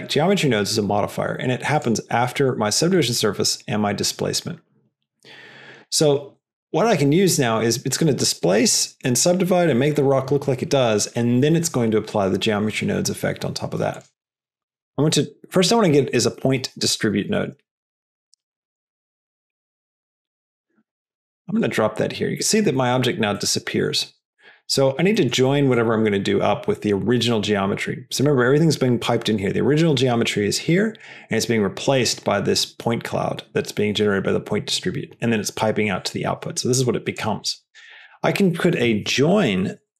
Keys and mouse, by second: 1.7 click, 2.4 drag, 5.8 drag, 6.3 click, 14.1 BackSpace, 16.1 BackSpace, 23.3 middle click, 24.0 click, 24.2 middle click, 24.6 click, 25.6 click, 29.2-30.9 drag, 36.0 click, 36.7 click, 37.6 shift+click, 37.7 shift+a, 39.1 o, 39.8 BackSpace.